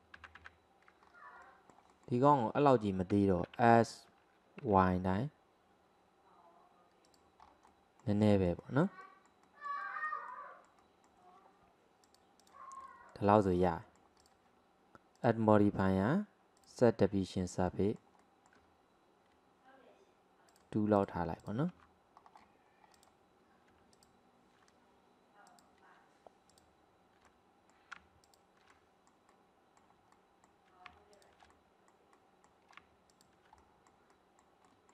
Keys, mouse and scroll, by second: 0.2 ctrl+z, 0.4 ctrl+z, 1.1 scroll down 1, 1.5-3.6 middle drag, 3.6 s, 7.5 scroll up 2, 7.7-12.1 middle drag, 12.1 click, 12.9-14.3 middle drag, 14.3 click, 15.2 click, 16.9-17.7 drag, 17.7-20.5 middle drag, 20.5 click, 21.5 click, 21.8 Tab, 22.2-23.0 scroll up 1, 23.0 drag, 24.0 alt+click, 25.5 click, 26.5 alt+click, 27.3 middle click, 28.3 alt+shift+click, 28.7-31.2 middle drag, 31.2 alt+shift+click, 31.5-33.1 middle drag, 33.1 alt+shift+click, 33.6-34.9 middle drag.